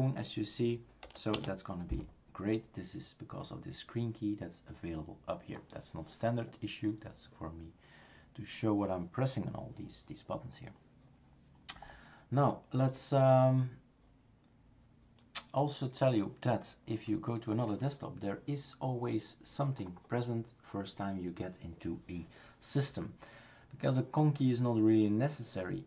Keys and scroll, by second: 1.0 BackSpace.